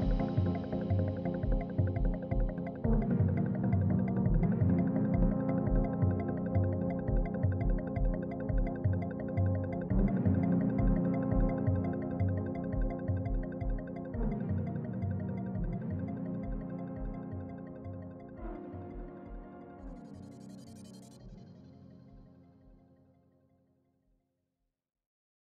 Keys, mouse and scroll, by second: 0.3-2.9 drag, 2.9 6, 3.6 click, 4.6 6, 5.3 click, 12.4-14.4 scroll down 4, 14.5-15.0 scroll up 2, 16.6 scroll up 2, 20.1-20.5 scroll up 2, 20.5 scroll down 1, 20.9-21.7 scroll up 2, 21.7 scroll down 1.